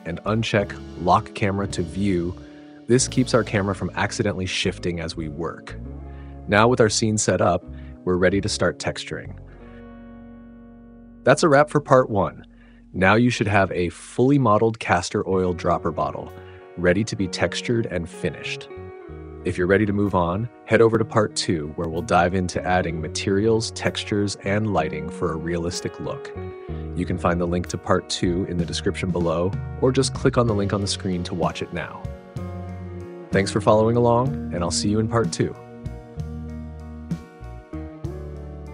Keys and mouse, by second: 3.6-5.6 drag, 8.2 n, 19.4 click, 20.3 click, 22.3 click, 22.5 click, 22.7-24.6 typing, 23.1 click, 23.4 click, 23.6 click, 24.4 click, 24.8 click, 25.8 click, 25.9 Tab, 26.0-27.9 typing, 26.5 click, 26.7 Tab, 28.4 middle click, 29.4 click, 29.4 KP_0, 29.6 click, 29.8 right click, 30.1 ctrl+t, 30.4 click, 30.7 click, 30.9 middle click, 31.3 click, 31.8 ctrl+s, 31.9-35.9 typing, 32.2 click, 33.5 click, 34.4 click, 34.9 click, 36.3 click, 36.7 ctrl+t, 37.1 click, 37.9 ctrl+s, 38.0 click, 38.6 click.